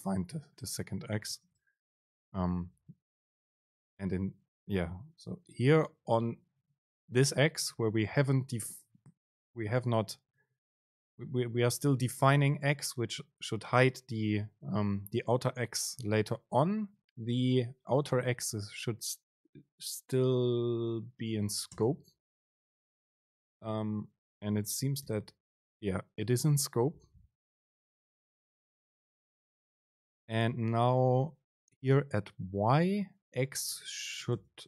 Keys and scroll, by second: 1.6 super+space, 4.0 Up, 22.3 super+space, 25.1 super+b, 29.3 BackSpace, 30.3 Down, 31.1 End, 34.4 super+space.